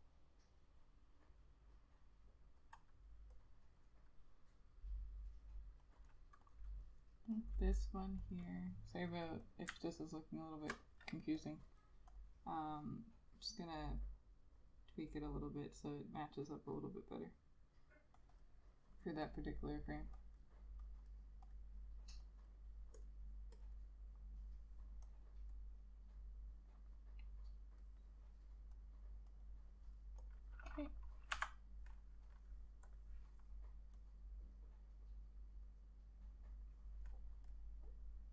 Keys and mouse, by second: 6.1 double click, 10.1 alt+click, 18.5 double click, 32.9 F6.